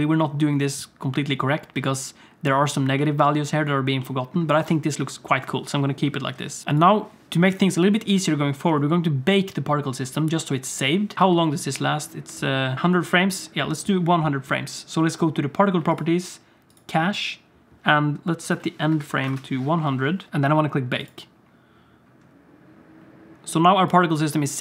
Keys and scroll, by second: 11.1 space, 11.1 z, 11.2 space, 19.3 0, 20.2 Tab.